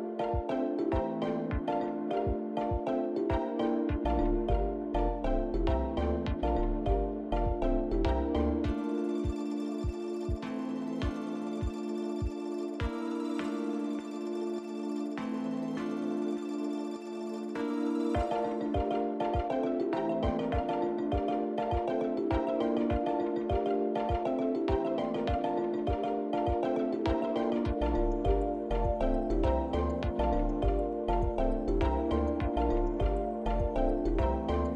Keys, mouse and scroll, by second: 2.7 click, 3.4 click, 4.4 click, 4.9 l, 9.9 click, 10.7 click, 11.7 Tab, 12.1-12.9 scroll down 2, 13.8 shift+middle click, 13.8-14.5 scroll down 4, 15.0 middle click, 16.6 shift+middle click, 17.4-17.7 scroll up 3, 18.6 click, 19.4 click, 22.4 Tab, 23.6 click, 24.7 l, 26.3 click, 27.0 click, 28.2 click, 29.4 KP_Decimal, 30.2 scroll down 4, 31.6 click, 31.6 scroll down 5, 32.3 click, 33.5 l.